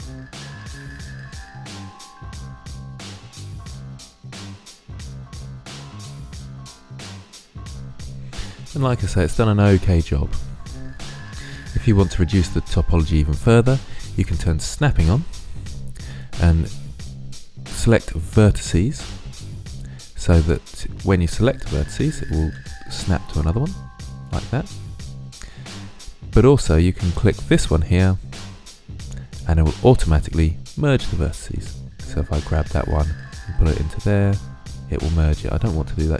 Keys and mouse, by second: 0.0 g, 0.9 click, 1.4 g, 1.6 click, 2.0 click, 2.4 right click, 2.9 click, 3.1 click, 3.3 right click, 3.6 middle click, 4.1 middle click, 5.1-5.9 middle drag, 6.0 middle click, 7.1-10.5 middle drag, 10.8-13.5 middle drag, 15.2-20.9 drag, 21.6 right click, 22.4 g, 24.2-25.8 drag, 25.9 click, 31.1 click, 32.2 g, 35.0-36.1 drag.